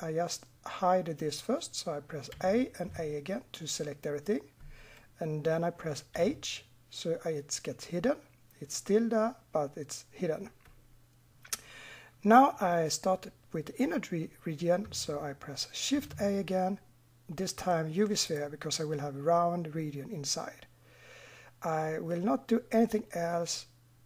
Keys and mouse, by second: 2.3 a, 2.9 a, 6.1 h, 15.9 shift+a.